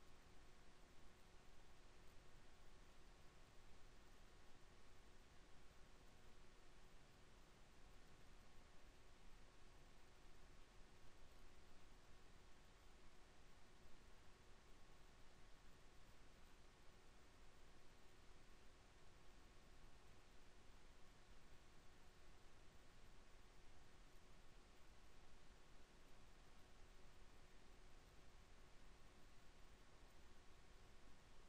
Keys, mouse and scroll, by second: 0.0 ctrl+r, 3.2 ctrl+r, 6.5 ctrl+r, 11.7 Tab, 12.3 Tab, 13.0 ctrl+r, 20.0 ctrl+r, 23.7 ctrl+r.